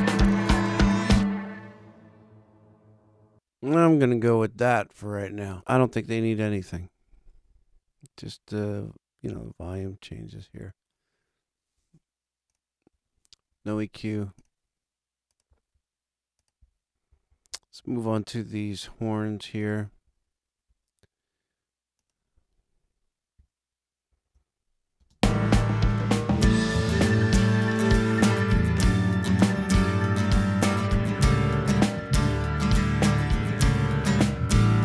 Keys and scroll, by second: 5.7 super+=, 24.1 super+=, 24.9 super+space.